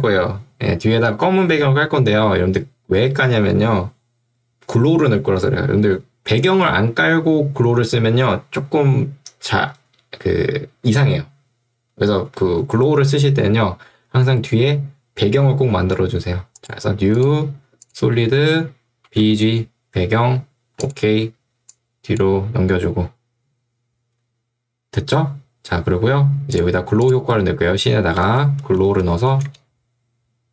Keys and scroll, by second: 19.2 g, 28.2 ctrl+space, 28.6-29.9 typing.